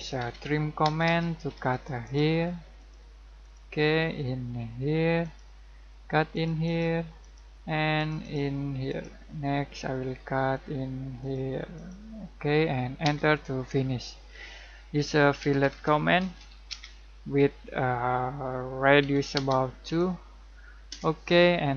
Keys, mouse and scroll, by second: 0.0-0.8 typing, 1.7 click, 2.3-2.7 scroll up 1, 2.7 click, 3.7 scroll down 1, 3.9 middle click, 5.2 click, 9.2 scroll down 1, 9.5 middle click, 10.4-11.2 scroll up 1, 11.2 click, 12.1 scroll down 1, 12.5 middle click, 13.0 space, 14.7-16.8 typing, 19.0 r, 19.3 space, 19.8 2, 20.9 Return.